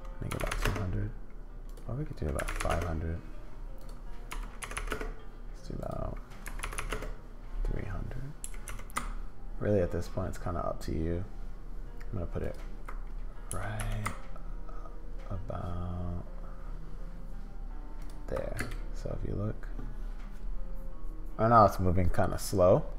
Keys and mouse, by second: 0.5 0, 2.6 0, 4.7 0, 6.7 0, 8.4 g, 13.5 g, 18.6 space.